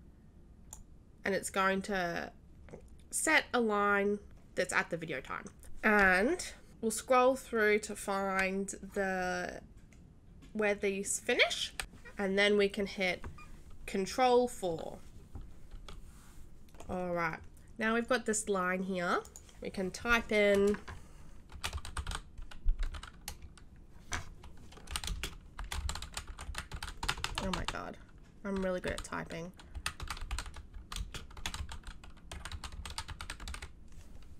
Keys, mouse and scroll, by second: 15.7 ctrl+4, 19.2 click, 21.4-22.5 typing, 24.9-27.0 typing, 29.7 c, 31.6-33.4 typing.